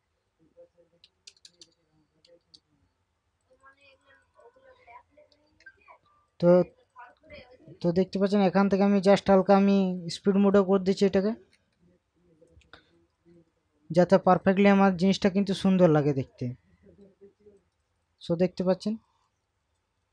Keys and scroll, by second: 1.1 1, 1.3 0, 2.4 Return, 5.3 ctrl+KP_Subtract.